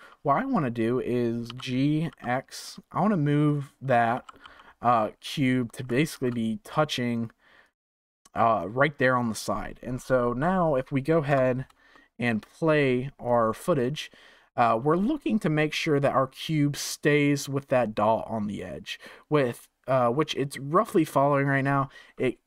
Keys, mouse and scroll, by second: 1.4 g, 4.1 g, 5.7 g, 9.8-10.4 scroll down 1, 10.4 middle click, 11.3 KP_0, 11.9-13.2 shift+middle drag, 13.2-16.3 drag.